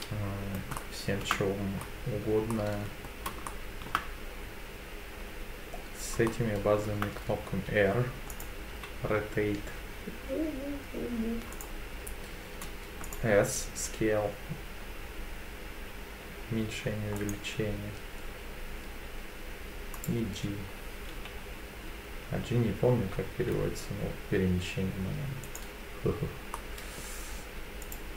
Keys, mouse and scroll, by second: 0.0-0.6 middle drag, 0.8-1.2 shift+middle drag, 1.5 scroll down 1, 1.8 scroll up 2, 2.5-3.1 middle drag, 3.5-3.9 shift+middle drag, 6.3 shift+middle click, 8.3 click, 8.7 r, 11.6 right click, 13.0 click, 13.7 s, 17.2 right click, 20.0 click, 21.1 g, 25.5 right click, 26.5 middle click, 27.8 click.